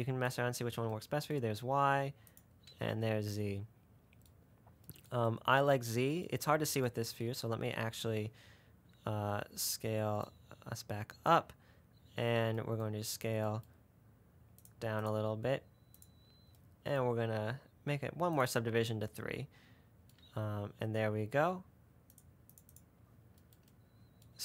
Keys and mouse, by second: 0.8-2.5 middle drag, 2.6-4.2 middle drag, 10.5-11.6 middle drag, 16.3 click, 18.6 click, 22.4 click, 22.6 middle click, 23.2-24.4 middle drag.